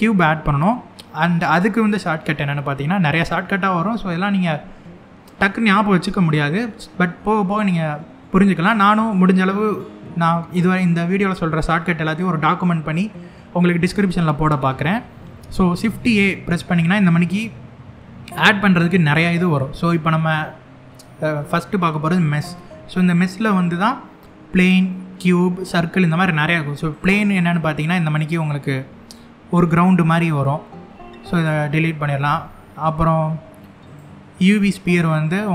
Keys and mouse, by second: 15.5 shift+a, 27.1-27.5 middle drag, 28.7-29.1 shift+middle drag, 29.4-29.9 middle drag, 30.5 x, 31.8 shift+a, 35.1-35.5 middle drag.